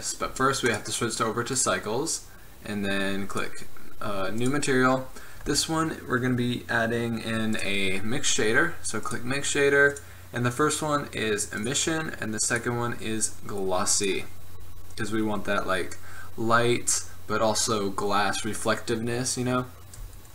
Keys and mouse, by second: 0.8-2.7 drag, 3.4-6.4 drag, 7.6-9.5 drag, 10.0-11.8 drag, 12.6-14.5 drag.